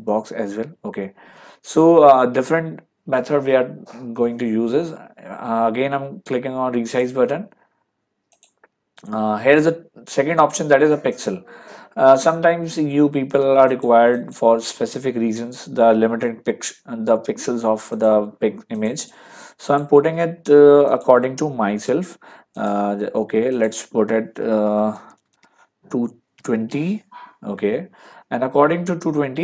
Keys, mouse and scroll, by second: 6.9 click, 8.4 click, 11.2 click, 13.7 click, 17.9 click, 20.9 click, 22.6 click, 25.0 BackSpace.